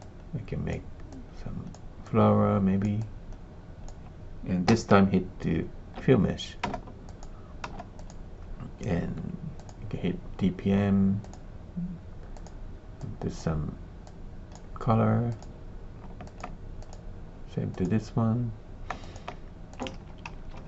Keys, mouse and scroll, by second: 1.0 click, 2.0 click, 2.9 click, 4.6 e, 6.6 space, 7.0 click, 7.6 space, 7.9 click, 9.5 click, 11.2 click, 15.4 click, 16.2 alt+click, 16.8 click, 17.9 click, 19.0 alt+click, 19.7 click, 20.0 shift+z, 20.2 shift+z.